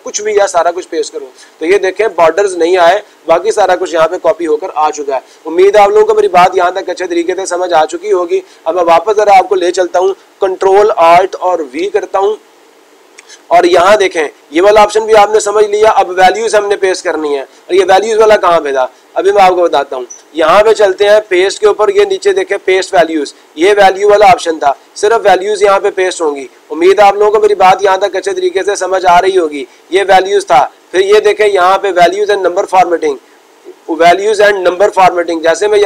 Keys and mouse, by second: 0.9-2.6 drag, 2.8-3.8 drag, 9.1 click, 9.5 click, 19.4-20.6 drag, 21.2-22.3 drag, 35.5 click.